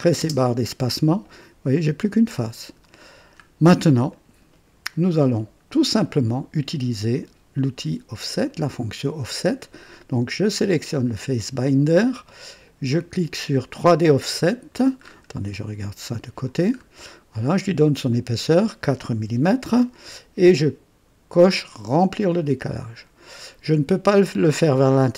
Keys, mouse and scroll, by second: 0.1 typing, 0.8 click, 1.3-2.0 typing, 1.8 click, 3.0-3.3 scroll down 1, 4.0-4.8 drag, 5.3-6.0 right drag, 7.1 click, 8.4 click, 10.7 click, 12.8 click, 13.8 click, 14.9 scroll up 1, 15.5-16.5 drag, 16.7 scroll up 1, 18.0 click, 19.2 KP_4, 22.2 click.